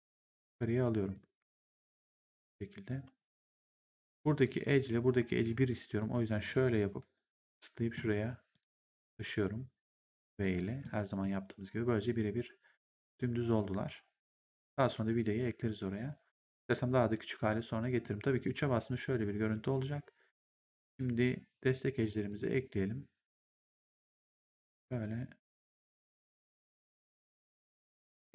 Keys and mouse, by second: 1.3 r, 3.7 right click, 4.4 click, 5.2 w, 5.9 click, 6.9 v, 7.3 middle click, 8.4 click, 8.7 v, 10.0 v, 10.3 middle click, 17.8 right click, 18.4 3, 19.3 1, 22.2 click, 24.4 ctrl+click, 25.6 ctrl+click, 27.0 ctrl+click.